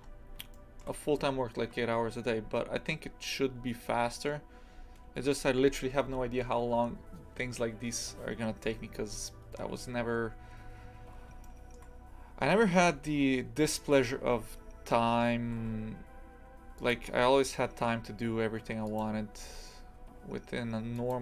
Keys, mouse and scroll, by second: 0.5-9.7 shift+middle drag, 9.7-11.4 scroll down 1, 11.4-12.5 shift+middle drag, 12.5-13.6 scroll up 2, 13.6-15.4 scroll down 1, 15.4 e, 17.0 e.